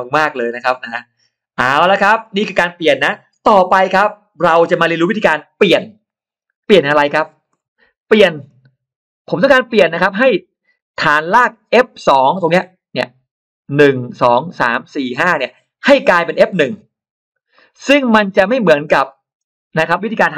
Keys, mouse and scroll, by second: 8.0 middle click, 9.9 middle click, 10.1-10.4 scroll up 1, 17.4 middle click, 18.3 scroll up 1, 18.9 middle click.